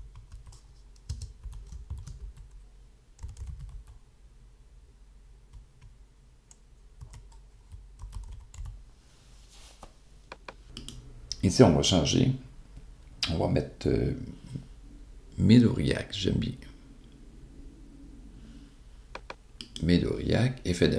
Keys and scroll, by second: 0.0-5.1 typing, 6.4 e, 7.9-9.9 typing.